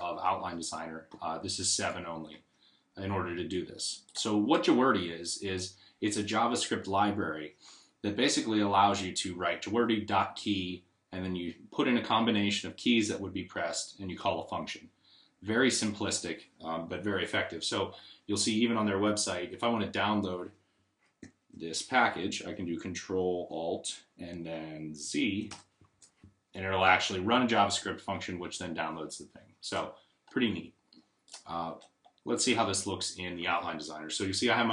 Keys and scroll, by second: 25.3 alt+z.